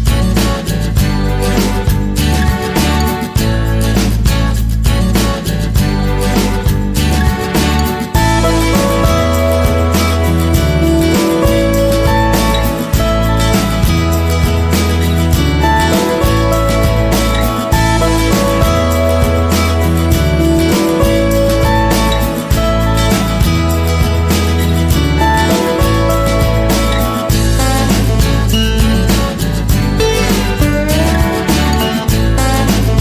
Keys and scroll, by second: 10.1 p, 28.1 p.